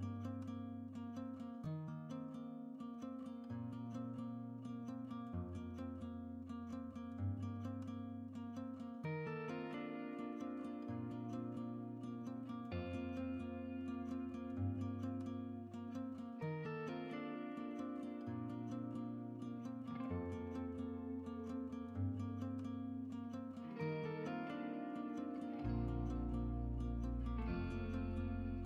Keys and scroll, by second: 5.9-6.8 typing, 7.8 Return, 14.1-15.6 typing.